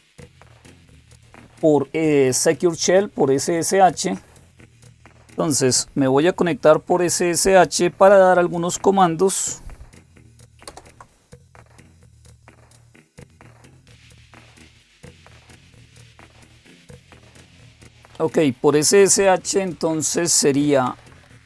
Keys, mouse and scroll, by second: 0.1 click, 3.4-5.0 drag, 10.5 super+Return, 20.5-21.4 typing.